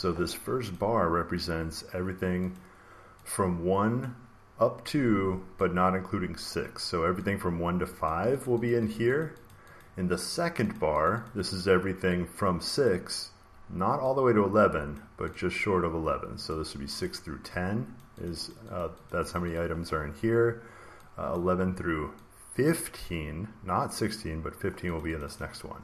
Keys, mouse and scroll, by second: 0.6 click, 2.5 click, 3.9 click, 6.4 click, 8.0 click, 8.4 click, 8.6 click, 8.8 click, 9.1 click, 9.4 click, 9.7 click, 10.3 click, 10.7 click, 11.0 click, 11.1 click, 12.8 click, 14.9 click, 15.2 click, 16.4 click, 16.9 click, 17.9 click, 18.2 click, 18.4 click, 18.7 click, 19.0 click, 19.3 click, 19.4 click, 21.2 click, 23.0 click, 24.9 click, 25.2 click, 25.3 click.